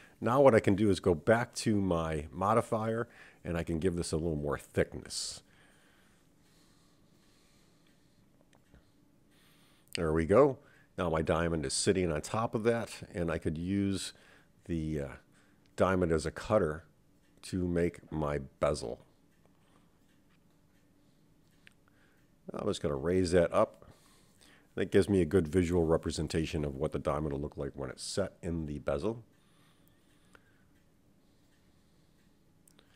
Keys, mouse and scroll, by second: 0.3 Tab, 2.7-8.1 drag, 8.2 Tab, 9.1-10.3 middle drag, 12.3-14.5 scroll down 3, 14.5 click, 16.0-17.5 drag, 18.0-19.2 middle drag, 20.8 click, 21.0-22.1 drag, 22.4-25.2 middle drag, 27.8-29.1 drag, 29.9 click, 30.1-32.9 drag.